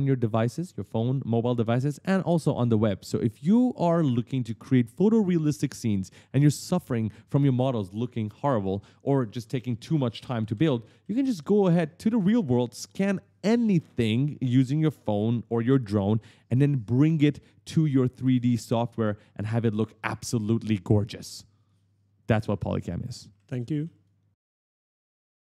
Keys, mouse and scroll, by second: 5.0-7.7 typing, 5.2 right click, 6.0 right click, 6.5 right click, 6.8 right click, 7.0 right click, 7.3 right click, 8.4 right click, 8.4 right click, 8.5 right click, 8.6 right click, 9.1 right click, 9.2 right click, 9.3 right click, 9.4 right click, 9.6 right click, 9.8 right click, 9.9 right click, 9.9 right click, 10.0 right click, 10.1 right click, 10.2 right click, 10.8 right click, 10.8 right click, 13.0 click, 14.9-20.9 typing, 15.1 right click, 15.6 right click, 16.0 right click, 16.8 right click, 17.1 right click, 17.5 right click, 17.9 right click, 18.2 right click, 18.5 right click, 20.7 right click, 21.0 right click, 22.4 right click, 22.4 a, 22.5 right click, 23.1 q, 23.2 right click, 23.6 right click, 24.4 click, 24.9 click.